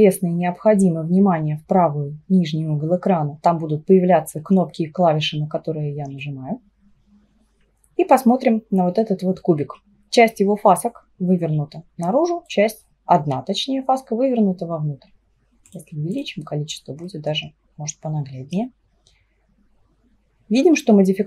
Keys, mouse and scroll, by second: 6.2-9.4 middle drag, 15.7-17.1 drag, 17.1-20.2 middle drag.